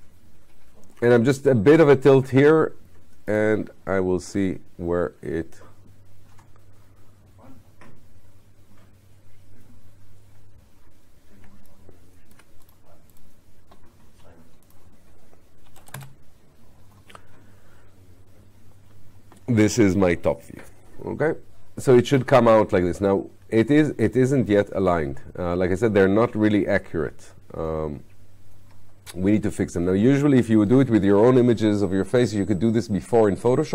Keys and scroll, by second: 15.7 9.